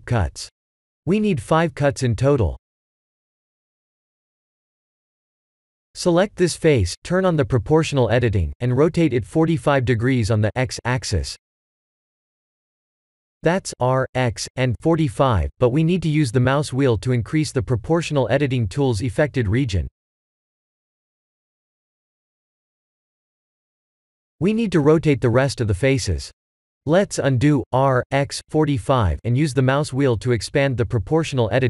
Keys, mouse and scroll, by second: 4.0 middle click, 5.3 3, 5.6 click, 7.3 KP_3, 10.3 click, 14.8 b, 20.8 middle click, 23.6 middle click, 26.1 ctrl+z, 27.8 r, 29.8 ctrl+z, 30.4 r.